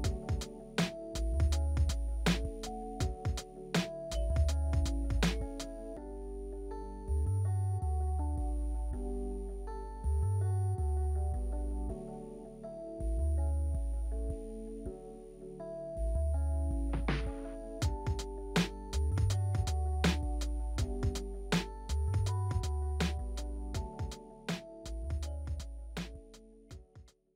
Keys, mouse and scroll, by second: 15.1 alt+w, 16.9 alt+w, 19.3 alt+w, 19.9 alt+middle click, 20.8 alt+middle click, 21.9 alt+click, 22.0 alt+middle click.